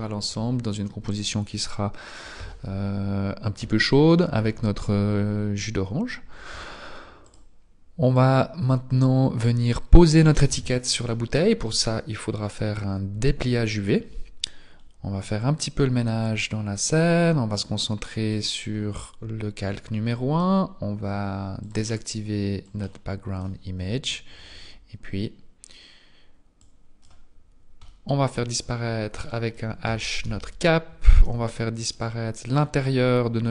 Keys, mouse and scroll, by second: 23.1 click, 24.3-25.3 scroll down 2, 26.7 click, 28.1 middle click, 28.6-29.3 scroll up 1, 29.3 shift+middle click, 29.3-30.2 scroll up 3, 30.2 h, 31.2 z, 32.0 right click.